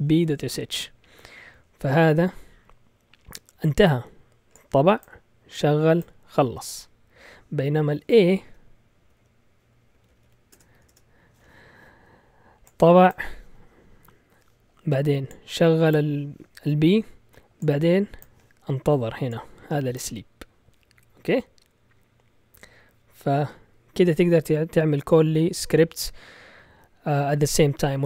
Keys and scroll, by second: 9.9 Left, 10.1 Left, 10.2 Left, 10.5 BackSpace, 10.7 a, 10.9 Return.